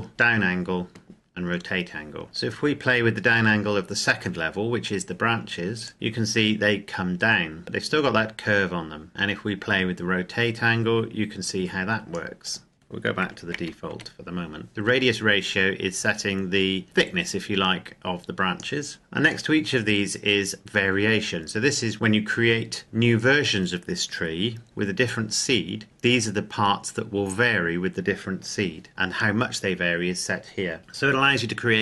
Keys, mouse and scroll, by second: 2.2 shift+middle click, 2.5 KP_Enter, 5.8 click, 13.2 KP_1, 13.4 KP_4, 13.8 KP_Enter, 14.7 click, 18.9 click.